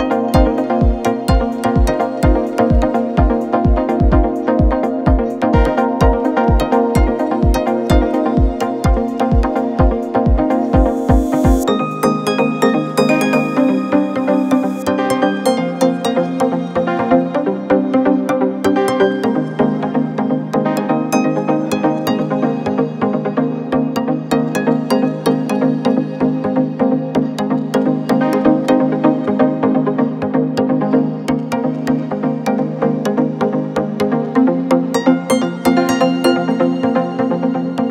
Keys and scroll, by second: 5.7 space, 6.6 space, 7.7 ctrl+z, 10.9 space, 11.4 ctrl+-, 12.9 space, 13.1 ctrl+=, 16.3 space, 16.5 ctrl+=, 16.8 space, 18.5 ctrl+z, 20.4 space, 22.8 ctrl+z, 26.7 space, 27.8 ctrl+-, 28.8 ctrl+=, 30.6 ctrl+z, 31.5 ctrl+z, 32.5 ctrl+=, 35.8 ctrl+-, 36.2 space, 37.0 ctrl+-.